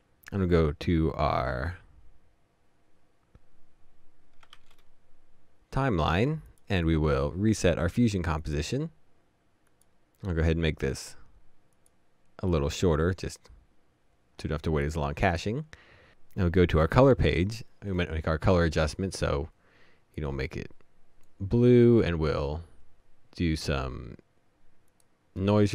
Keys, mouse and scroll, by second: 4.6 shift+4, 6.7 right click.